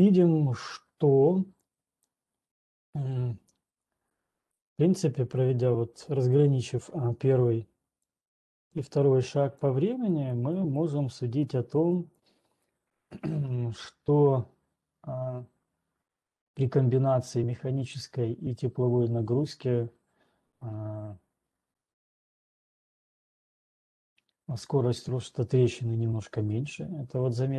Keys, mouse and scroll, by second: 0.1-1.5 drag, 2.1 click, 5.1 click, 6.6 click, 8.6 click, 9.1 click, 9.6 click, 10.6 click, 11.1 click, 11.6 click, 12.1 click.